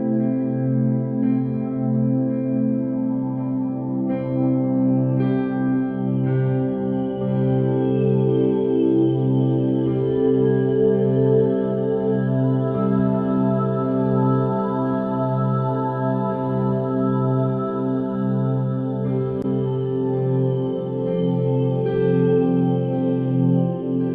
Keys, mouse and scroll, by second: 2.5 click, 2.9 g, 5.5 click, 6.1 g, 6.7 e, 7.5 e, 11.2 click, 11.5 g, 12.8 click, 13.1 g, 15.2 click, 15.6 g, 17.2 click, 17.6 g, 18.6 click, 18.9 g, 20.0 click, 20.3 g, 21.4 Tab, 23.2 alt+z, 23.8-24.1 middle drag.